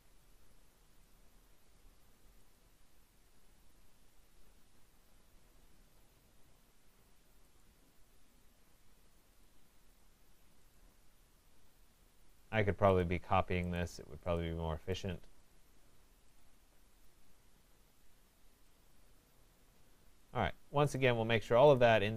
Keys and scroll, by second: 5.2 Return, 18.8 Return.